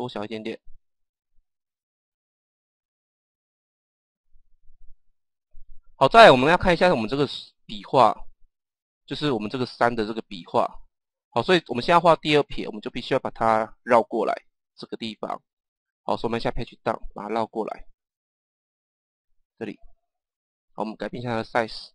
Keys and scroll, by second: 16.0 Page_Down.